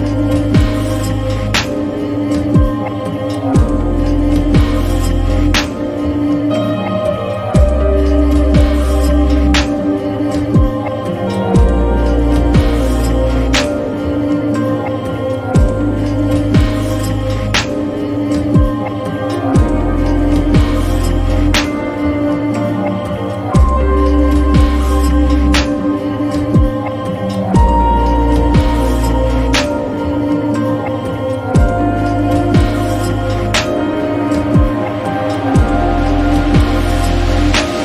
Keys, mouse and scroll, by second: 2.1-11.3 drag, 13.4-18.8 drag, 18.8 ctrl+t, 20.5-28.8 drag, 29.8-36.2 drag.